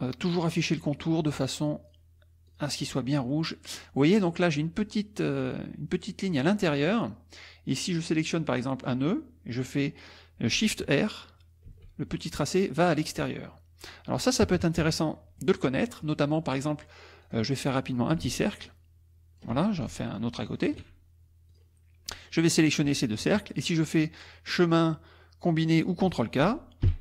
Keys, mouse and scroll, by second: 0.3 click, 1.7 click, 2.5 click, 3.2 middle click, 8.9 click, 11.7 shift+r, 14.4 KP_Subtract, 15.2 middle click, 15.7 middle click, 17.3 click, 18.1-19.6 ctrl+shift+drag, 19.9 ctrl+shift+click, 21.5 click, 22.3-23.1 drag, 24.3 click, 25.8 click, 26.9 ctrl+k.